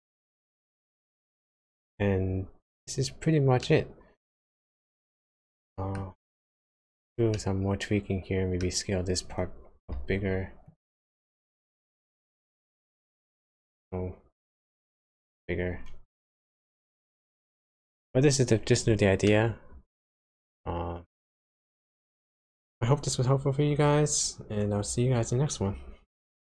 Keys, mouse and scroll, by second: 2.6 click, 3.6 middle click, 5.5 middle click, 6.6 Tab, 7.3 middle click, 9.9 shift+z, 10.6 click, 11.9 shift+z, 12.9 s, 15.0 Tab, 16.1 space, 19.2 middle click.